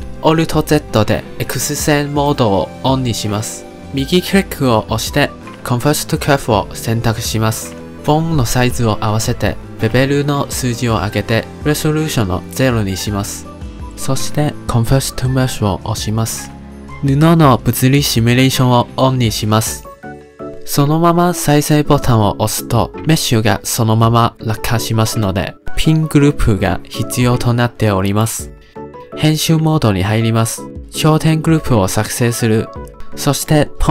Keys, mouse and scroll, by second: 0.1-1.0 middle drag, 1.0 KP_Decimal, 2.1 alt+z, 4.9-8.3 right drag, 8.3 click, 9.3-14.4 drag, 14.4-19.0 right drag, 19.0 click, 19.6-22.9 drag, 22.9 middle click, 23.4-24.5 scroll down 2, 25.2-29.9 drag, 29.9-30.2 middle drag, 30.2-30.5 scroll up 1, 30.5 Tab, 31.5 click, 32.8-33.9 drag.